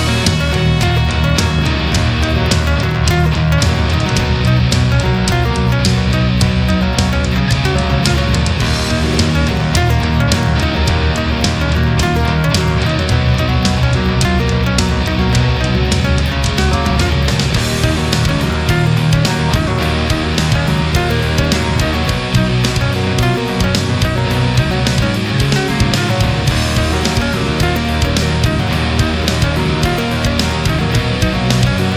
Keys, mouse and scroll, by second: 0.3-2.1 drag, 2.1 middle click, 6.7-7.8 middle drag, 9.2 right click, 10.0 shift+right click, 11.0-12.8 drag, 12.9-15.8 middle drag, 15.9 a, 16.1-17.3 middle drag, 17.4-17.7 scroll up 2, 18.5-19.0 shift+middle drag, 19.3 shift+right click, 20.1-21.6 drag, 23.0 right click, 23.6-25.2 drag, 25.2-26.6 middle drag, 27.2 middle click, 30.5 ctrl+z, 31.7 a.